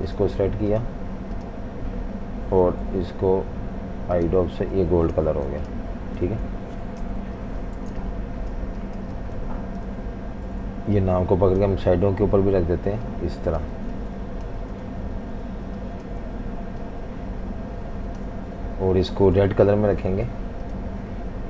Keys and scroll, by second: 2.8 i, 5.1 super+g, 5.5 v, 6.2 v, 7.0 super+-, 7.2 super+-, 7.9-9.9 typing, 13.8-15.4 typing, 19.6 i, 21.2 v.